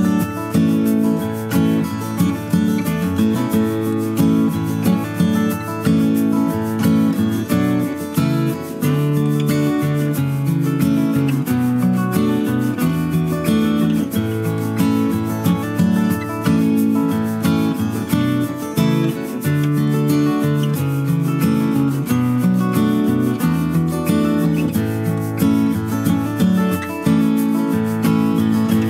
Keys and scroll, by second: 6.1 ctrl+c, 6.3 ctrl+v, 10.7 Right, 10.8 Down, 11.2 Right, 13.0 Down, 14.1 ctrl+c, 14.2 ctrl+v, 15.5 Right, 16.5 Up, 22.5 ctrl+c, 22.7 ctrl+v, 28.3 space.